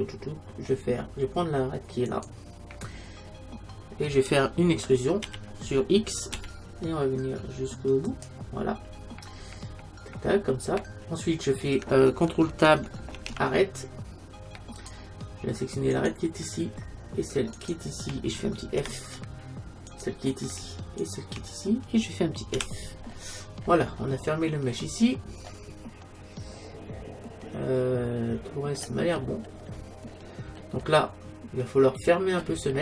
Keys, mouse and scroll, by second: 2.1-4.0 right drag, 3.2-5.3 middle drag, 5.3 e, 8.3-11.6 drag, 13.2 ctrl+Tab, 15.9-19.4 right drag, 18.8 f, 19.9-22.7 right drag, 22.6 f, 23.0 middle click, 25.5-27.5 middle drag, 29.2-31.2 middle drag, 31.5 middle click, 31.9 middle click.